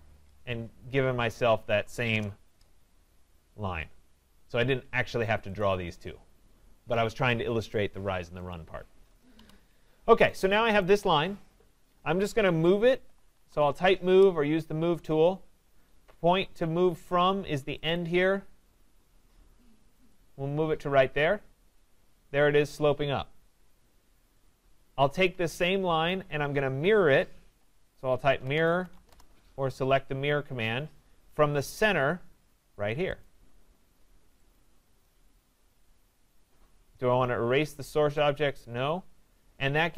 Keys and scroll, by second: 13.6 Return, 29.1 Return.